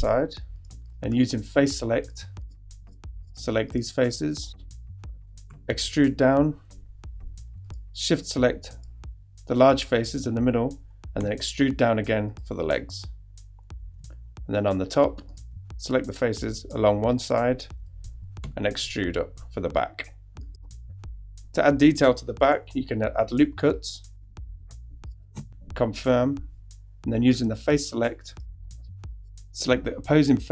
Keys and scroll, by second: 5.5 e, 11.2 shift+e, 18.4 shift+e, 18.9 e, 22.5 super+r, 25.3 ↺.